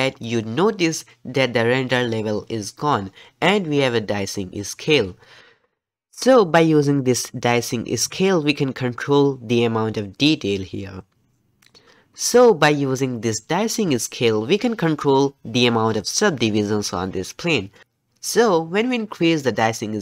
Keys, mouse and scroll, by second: 19.6-20.0 drag.